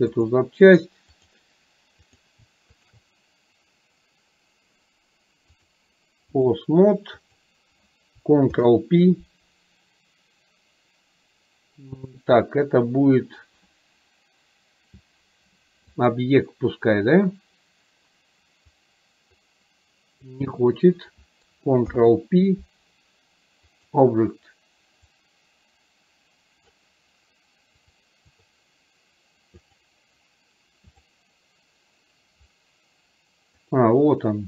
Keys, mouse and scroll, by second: 0.2 click, 0.8 click, 2.2 click, 5.7 click, 7.3 click, 18.7-20.3 drag, 25.3-26.7 drag, 27.8 click, 29.8 click, 33.7-34.4 drag.